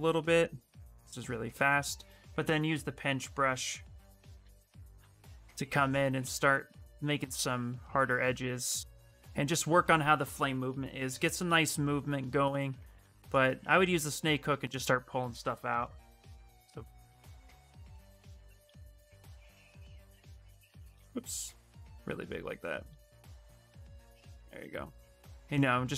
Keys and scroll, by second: 2.2 b, 2.8 p, 3.2 i, 4.2 s, 5.5 s, 13.4 space, 14.4 s, 15.5-18.8 typing, 20.2 s, 21.0 s, 23.0 s.